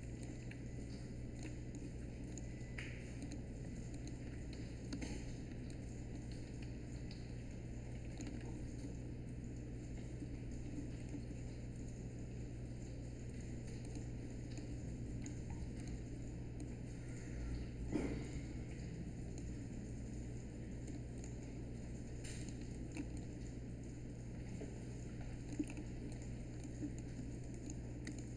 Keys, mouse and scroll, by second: 4.9 w.